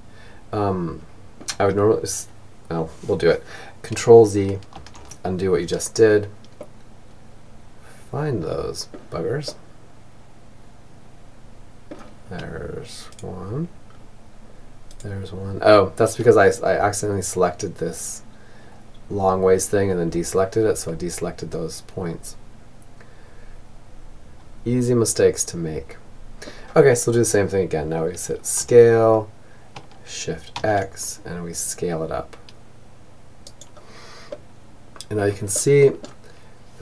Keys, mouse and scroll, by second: 3.1 ctrl+z, 4.9-6.5 middle drag, 6.6 middle click, 7.8-9.9 middle drag, 12.5-15.0 right drag, 19.3-21.1 middle drag, 25.0-27.0 middle drag, 27.0 s, 32.6-35.9 middle drag, 35.5 Tab.